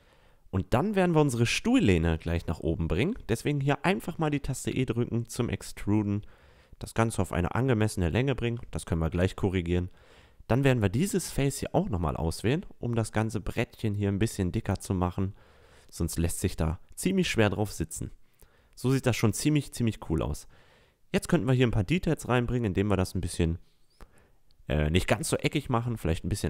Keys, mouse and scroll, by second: 1.9-2.4 drag, 3.3 e, 7.6-8.7 middle drag, 8.7 click, 8.8-9.1 middle drag, 9.1 right click, 9.7 a, 11.0 right click, 11.5 middle drag, 11.9 e, 17.5 a, 18.8 middle click, 19.3 click, 20.1-20.7 middle drag, 20.7-23.1 drag, 23.1 s.